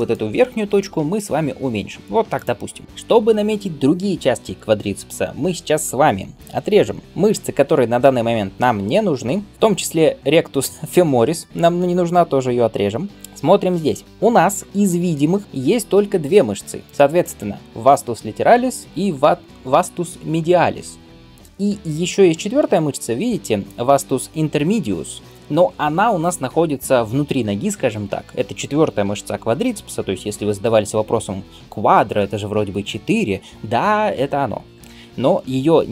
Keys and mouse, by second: 0.7 alt+s, 21.5-35.9 middle drag.